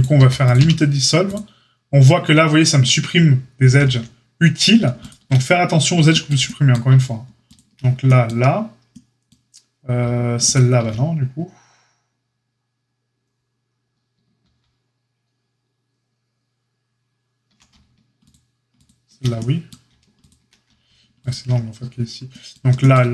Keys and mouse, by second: 0.1 a, 0.5 q, 3.6 ctrl+z, 4.9 alt+shift+click, 5.0-7.5 alt+shift+middle drag, 7.5 alt+shift+click, 7.7-23.1 alt+shift+middle drag, 10.4 alt+shift+click, 14.4 ctrl+z, 18.2 alt+shift+click, 18.8-19.1 alt+shift+drag.